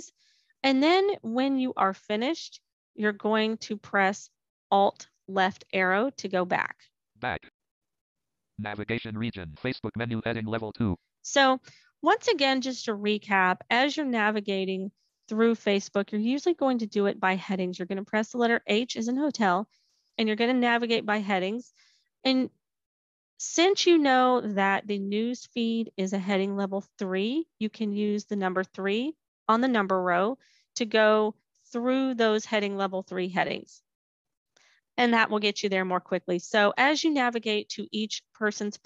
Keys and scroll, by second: 4.6 alt+Left.